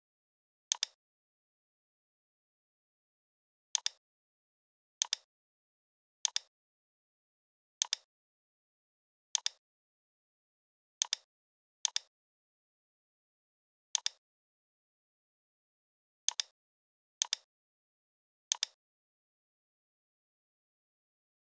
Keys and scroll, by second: 2.0 v.